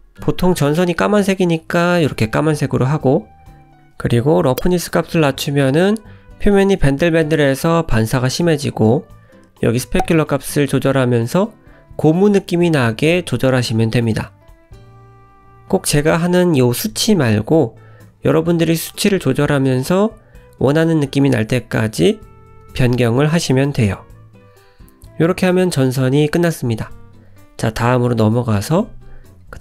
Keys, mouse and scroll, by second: 0.2 shift+middle click, 0.7 click, 1.1 middle click, 3.0 click, 6.9 click, 10.1 click, 10.6 scroll down 1, 10.8 middle click, 12.5-13.1 scroll down 2, 14.0-14.5 scroll up 2, 14.5 click, 19.6 click, 19.9 scroll down 1, 20.0 middle click, 21.9-22.4 scroll down 3, 22.4 middle click, 23.0-23.5 scroll up 1, 23.5-24.1 scroll down 1, 24.3 click, 24.7 shift+click, 25.3 click, 27.0-27.3 scroll down 2, 28.2 shift+middle click.